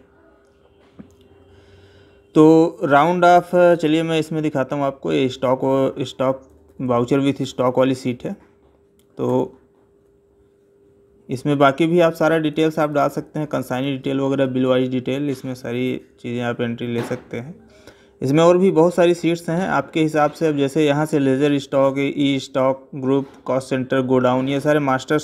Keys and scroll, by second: 6.3 Right, 7.2 Up, 9.1 Right, 12.2 Left.